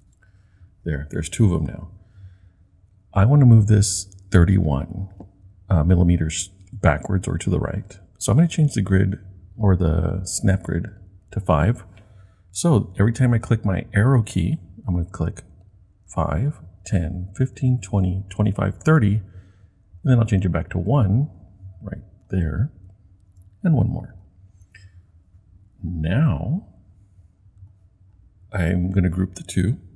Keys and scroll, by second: 16.0 Right, 16.8 Right, 17.4 Right, 17.9 Right, 18.1 typing.